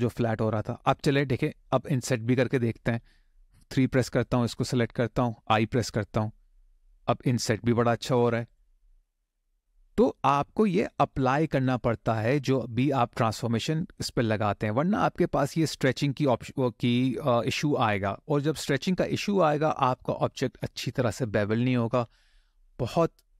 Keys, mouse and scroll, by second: 0.6 middle click, 1.4 shift+middle click, 2.0 middle click, 3.6 3, 4.0 click, 5.6 i, 8.2 click, 8.7 click, 9.0 middle click, 11.0 shift+middle click, 11.5 middle click, 14.1-14.6 scroll down 3, 14.6 middle click, 15.8 scroll down 1, 15.9-17.2 scroll up 3.